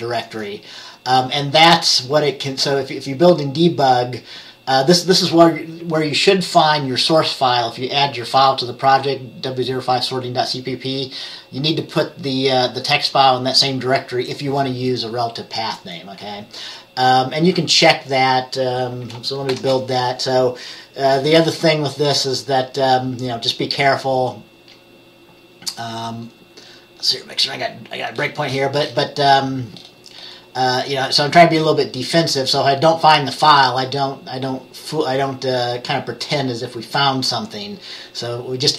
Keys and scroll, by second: 19.6 ctrl+b.